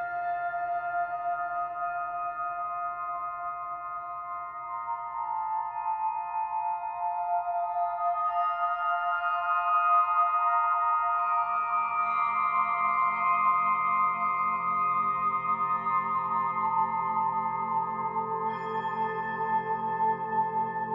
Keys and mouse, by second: 0.3 alt+click, 1.4 click, 2.9-4.0 typing, 4.9 shift+click, 8.6-11.3 alt+drag, 11.7-12.7 ctrl+alt+drag, 13.0 alt+shift+click, 13.8-16.0 alt+drag, 17.5 click, 18.4-19.7 alt+drag.